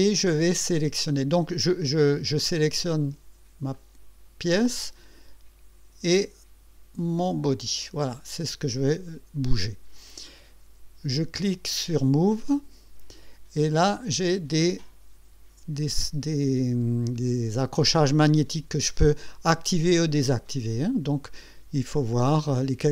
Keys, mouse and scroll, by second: 3.8 click, 7.2 click, 12.4 click.